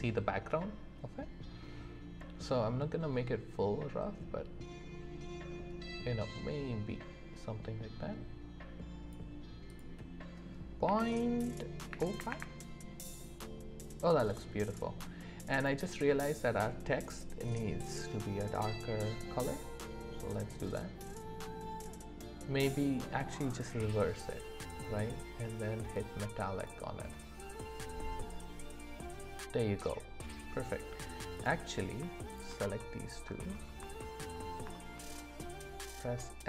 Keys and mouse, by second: 33.8 shift+middle click.